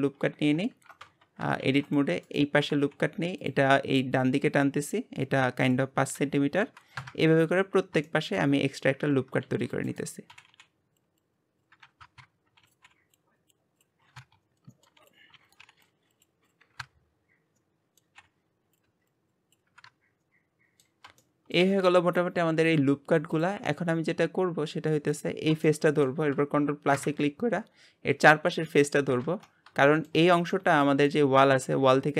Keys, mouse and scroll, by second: 0.6 scroll down 1, 1.0 shift+middle click, 1.4 Tab, 2.5 Tab, 3.1 ctrl+r, 4.1 g, 5.7 click, 7.1-9.5 drag, 9.5 shift+middle click, 10.3-10.9 scroll up 1, 10.9 ctrl+r, 11.8 g, 12.7-14.2 drag, 14.3 ctrl+r, 14.6 g, 15.7 click, 16.4 shift+middle click, 17.0 ctrl+r, 17.5 ctrl+r, 17.8 g, 18.3-19.7 drag, 20.0 middle click, 20.8 g, 21.7 click, 22.2 click, 23.0-26.2 middle drag, 26.2-28.1 drag, 28.5-29.8 shift+middle drag, 29.8 ctrl+KP_Add, 31.5 middle click.